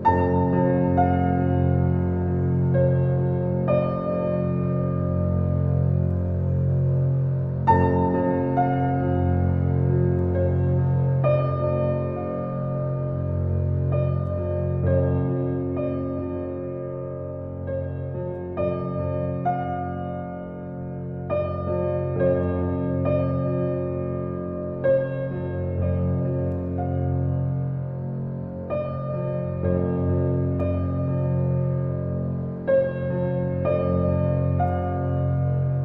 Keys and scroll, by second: 10.6 ctrl+z, 20.8 ctrl+z.